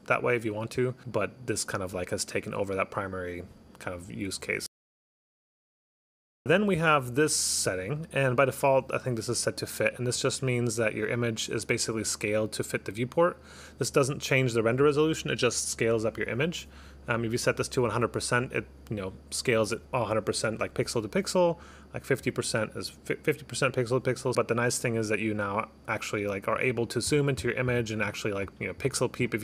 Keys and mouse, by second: 0.3 click, 1.2 click, 6.4 click, 6.5 click, 6.8 click, 8.4 click, 10.3 click, 16.5 click, 17.6 click, 19.1 click, 21.6 click, 22.3 click, 24.3 click, 24.5 click.